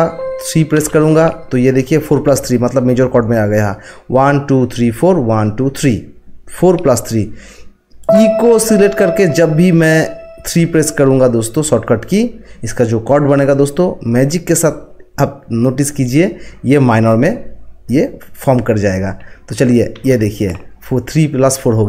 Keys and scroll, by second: 0.8 3, 19.9 3.